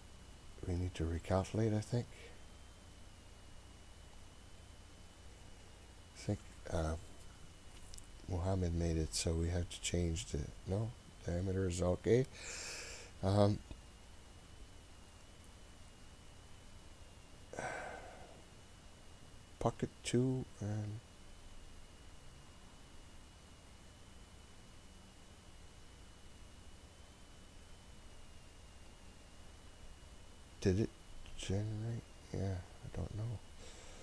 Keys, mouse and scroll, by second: 4.8-8.4 scroll down 20, 8.4-9.1 scroll up 2, 9.1-10.0 scroll up 2, 10.0-11.3 scroll up 1, 11.3-12.0 scroll up 1, 12.0-15.6 scroll up 17, 15.6-17.9 scroll up 1, 32.2-33.8 scroll down 2, 33.8-34.0 scroll down 1.